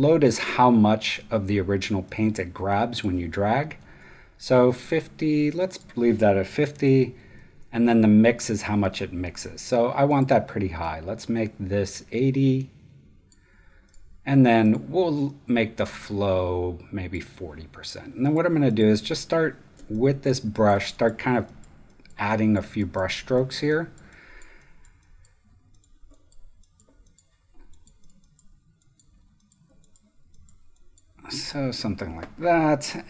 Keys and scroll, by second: 3.8 super+z, 6.4-7.2 typing.